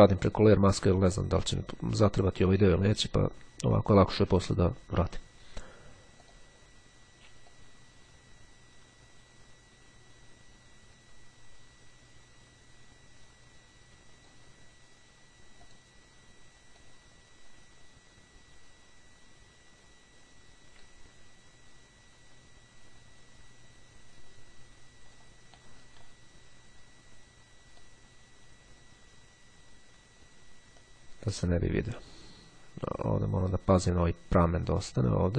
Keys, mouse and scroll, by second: 0.4 click, 6.3 click, 6.6 ], 7.6-14.9 drag, 15.7 click, 16.9-25.7 drag, 25.7-26.6 scroll down 2, 27.9-30.6 drag, 30.9-35.3 drag.